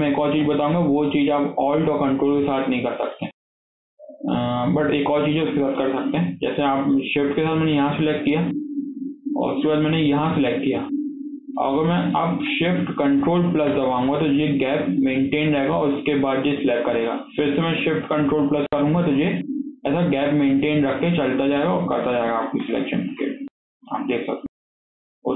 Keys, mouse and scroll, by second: 0.2 KP_1, 2.1-2.6 scroll up 2, 2.6 shift+middle click, 3.1-6.1 shift+middle drag, 7.1 click, 10.0 shift+click, 11.6-13.5 shift+middle drag, 13.5 ctrl+shift+KP_Add, 18.5 ctrl+shift+KP_Add, 21.8-22.6 ctrl+shift+KP_Add, 22.8 alt+z, 23.1 scroll down 1, 23.3-24.3 middle drag, 24.3 ctrl+shift+KP_Add, 24.4 ctrl+shift+KP_Add, 24.6 ctrl+shift+KP_Add, 24.7 ctrl+shift+KP_Add, 24.9 ctrl+shift+KP_Add, 25.1-25.3 ctrl+shift+KP_Add.